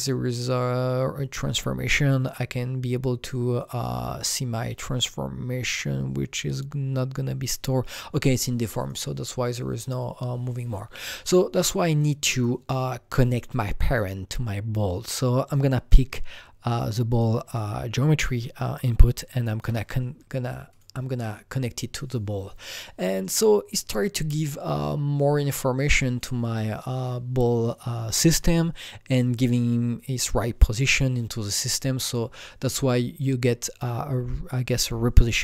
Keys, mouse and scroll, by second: 0.3-6.9 drag, 6.9-8.8 drag, 8.8 click, 9.5 click, 12.0-15.5 drag, 15.5-17.6 drag, 17.6-24.8 shift+drag, 26.0-28.7 shift+drag, 29.6-32.8 drag.